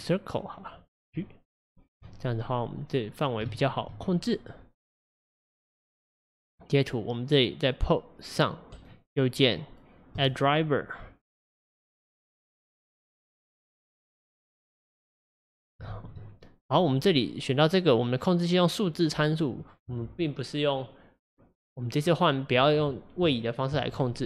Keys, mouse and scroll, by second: 2.1-3.1 middle drag, 3.1-3.5 scroll up 3, 3.5 shift+middle click, 4.0 scroll up 1, 4.3-5.8 middle drag, 5.8 click, 15.9 ctrl+z, 16.9 click.